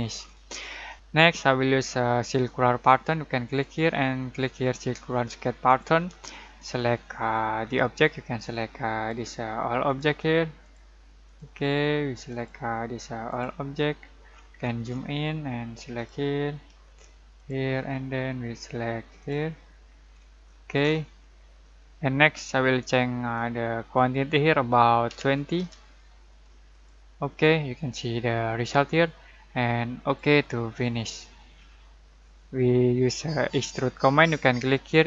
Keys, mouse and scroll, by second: 0.0 scroll down 1, 0.1-0.9 scroll up 1, 0.9 click, 3.4 click, 8.4-10.6 drag, 14.2-15.9 scroll down 1, 15.9 click, 17.7 scroll down 1, 19.2 click, 19.8-20.1 scroll down 1, 21.3-21.9 scroll down 1, 23.3-25.0 drag, 25.0-25.5 typing, 26.7 click, 30.0 click, 30.0 click, 31.2-31.5 scroll down 1, 33.4 scroll up 1, 33.6 click.